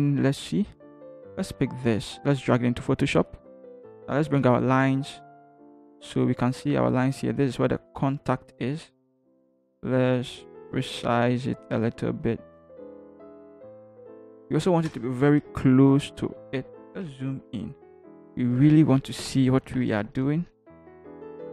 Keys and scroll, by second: 4.3 ctrl+h, 14.9 shift+Return, 15.5 shift+Right, 16.2 Right, 17.1 =, 17.7 =, 21.4 Up.